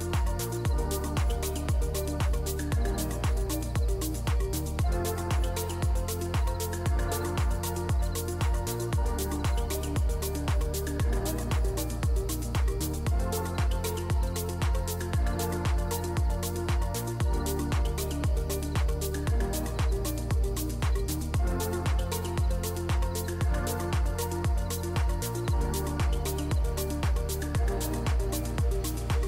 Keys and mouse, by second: 0.5 click, 2.5 space, 4.4 space, 5.3 ctrl+s, 5.8 space, 11.0 space, 12.6 click, 16.4 click, 17.4-18.4 drag, 22.9 ctrl+s, 24.4 click, 25.0 click, 26.1 click, 26.7-27.1 drag, 27.3 click, 27.5 click.